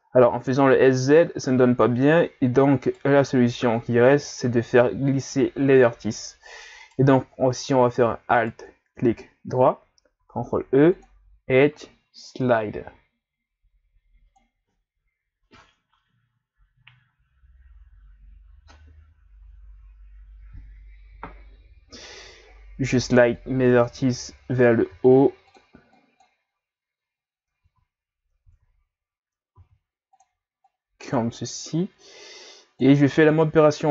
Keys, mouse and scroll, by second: 0.2 scroll up 1, 0.2-2.8 middle drag, 2.8 alt+right click, 6.8 right click, 8.4 alt+right click, 10.2 ctrl+e, 23.3 click, 24.1 ctrl+z, 24.9 ctrl+e, 27.6 ctrl+z, 28.4 ctrl+z, 29.5 ctrl+e.